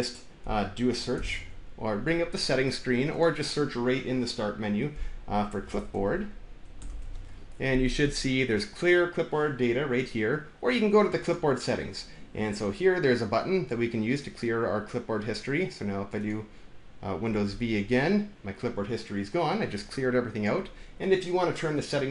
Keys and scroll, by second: 1.0 super+i, 5.2-7.5 typing, 17.3 super+v.